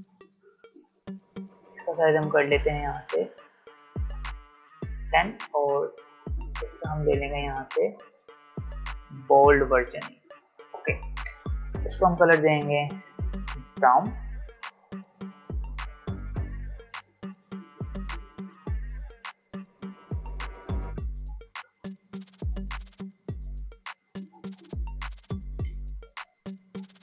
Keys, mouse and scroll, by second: 2.4 click, 10.2 click, 12.4 i, 13.4 click, 16.3 v, 16.9 click, 18.5-18.8 alt+scroll up 1, 19.4-22.0 drag.